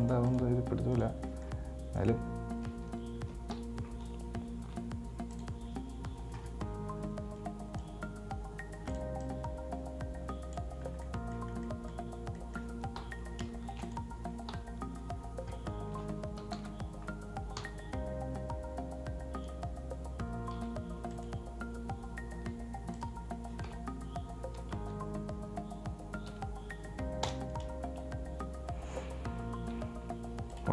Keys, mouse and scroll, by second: 0.3 right click, 0.6 right click, 1.2 right click, 1.5-2.3 middle drag, 2.3 right click, 3.8 KP_1, 4.9 r, 7.6 Tab, 8.1 right click, 9.5-11.1 drag, 11.1 scroll down 2, 11.2-11.7 middle drag, 11.7 scroll up 1, 11.9-13.2 middle drag, 13.2 KP_7, 13.8 shift+d, 14.7 KP_7, 16.1 r, 22.6 g, 23.9 r, 30.0 g.